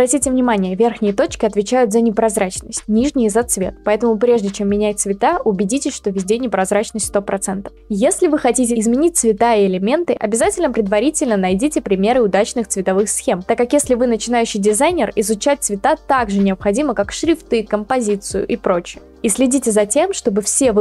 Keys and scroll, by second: 4.1-5.0 typing.